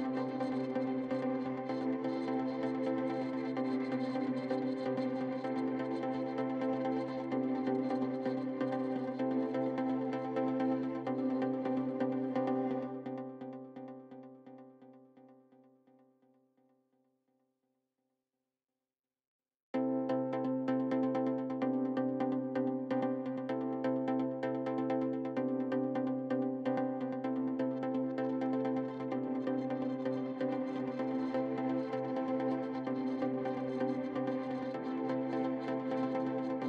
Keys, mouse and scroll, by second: 0.1 alt+click, 0.2 middle click, 0.4-1.5 drag, 2.0-3.0 alt+drag, 3.2 click, 4.5 alt+click, 5.2 scroll down 3, 5.3 shift+middle click, 5.7-6.1 scroll up 3, 5.8 shift+middle click, 6.1-7.2 shift+middle drag, 7.2 alt+click, 7.4 middle click, 7.8 click, 8.5 middle click, 8.8-9.8 drag, 10.1 middle click, 10.7 click, 10.8 middle click, 11.6 ctrl+click, 11.7 middle click, 11.9 ctrl+z, 12.3 middle click, 12.8 ctrl+click, 13.0 middle click, 13.5 click, 14.4 middle click, 15.1 click, 15.5 middle click, 16.3 scroll down 3, 16.4 middle click, 17.1 scroll down 1, 17.3 shift+middle click, 18.1 KP_3, 18.6 click, 18.8-19.1 scroll up 5, 18.9 shift+middle click, 19.2 shift+middle click, 19.9 shift+middle click, 20.8 click, 26.7 right click, 27.6-28.0 scroll up 3, 31.3 scroll up 2, 31.5-32.8 scroll down 2, 35.2-35.6 scroll up 3, 35.6 middle click, 36.1 KP_Decimal.